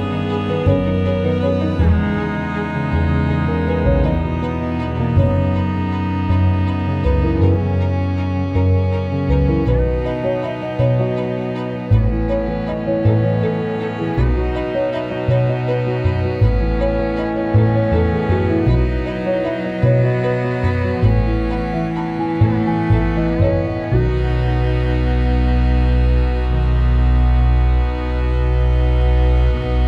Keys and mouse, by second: 0.1 click, 0.3 alt+middle click, 0.8 KP_3, 1.5 Tab, 1.7 Tab, 1.8 Tab, 2.2 shift+d, 2.5 s, 2.9 g, 4.0-5.9 typing, 4.3 click, 4.9 Tab, 5.0 Tab, 7.2-10.2 typing, 10.4 click, 11.6 ctrl+s, 12.1 n, 12.4 click, 12.4 Tab, 12.6 alt+middle click, 12.8 shift+middle click, 13.0 ctrl+r, 14.9 middle click, 15.3 3, 15.3 click, 15.6 i, 17.2 e, 18.5 alt+middle click, 19.1 alt+middle click, 20.1 ctrl+KP_Add, 20.2 ctrl+KP_Add, 20.8 KP_3, 21.1 g, 22.3 alt+middle click, 22.8 alt+middle click, 23.0 s, 23.4 middle click, 23.7 KP_3, 24.1 middle click, 25.0 2, 25.1 click, 25.4 s, 26.2 click, 26.7 alt+s, 26.7-28.2 middle drag, 28.3 Tab, 28.3 click, 28.5 alt+middle click, 28.7 Tab, 29.1 alt+middle click, 29.3 middle click, 29.6 KP_1.